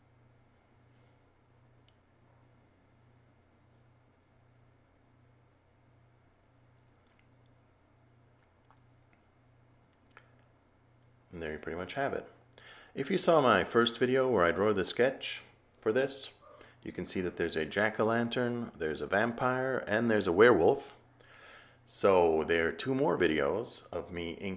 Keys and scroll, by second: 1.6 a, 2.7 a, 20.6 a, 21.4 a.